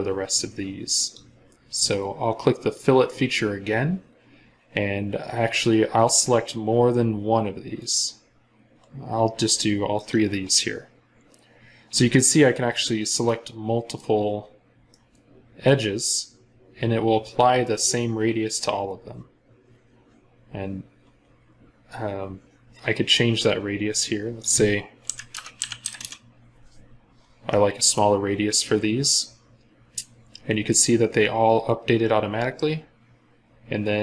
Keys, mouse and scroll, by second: 13.0 scroll up 1, 13.1 middle click, 14.0 scroll down 1, 14.7 middle click, 14.8 scroll down 1, 24.9-25.8 typing, 25.8 Return, 27.1 scroll up 1, 27.3 middle click, 28.2 scroll down 1.